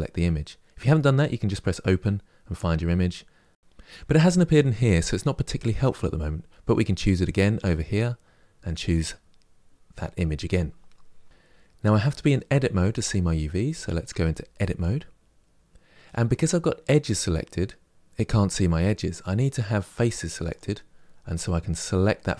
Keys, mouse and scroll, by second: 8.4-13.8 drag, 13.8 Tab, 19.6 click, 20.2 click.